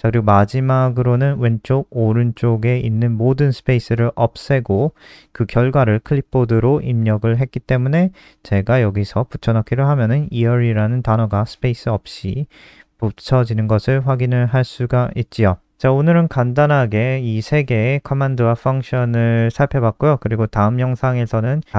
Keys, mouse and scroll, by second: 8.8 Return, 9.0 Return, 9.2 ctrl+v, 13.4 click, 13.6-14.4 scroll down 5, 14.4 click, 17.3 shift+click, 17.8 shift+Down, 18.0 shift+Down.